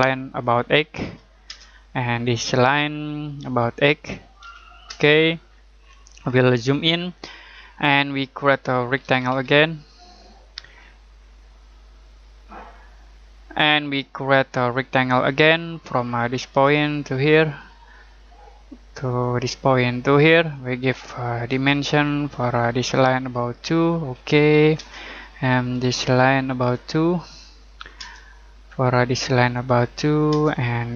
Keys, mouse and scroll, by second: 1.0 8, 1.4 Return, 2.6 click, 4.4 8, 4.8 Return, 5.5-8.9 scroll down 1, 8.7-9.8 typing, 12.1 click, 15.1 click, 21.5 d, 22.5 click, 24.7 Return, 25.9 click, 28.0 Return, 28.8 click, 30.3 Return.